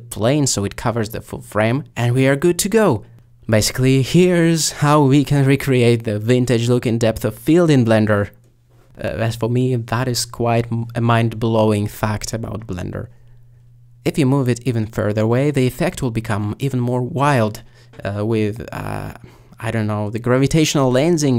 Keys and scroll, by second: 7.1-8.2 typing, 20.0 s.